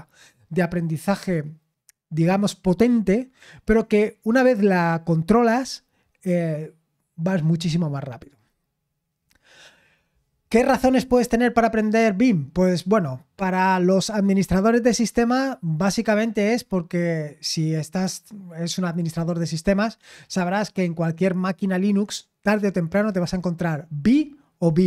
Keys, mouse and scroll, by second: 7.7-8.6 scroll down 1, 8.7-9.5 scroll down 2, 9.5-10.2 scroll up 2.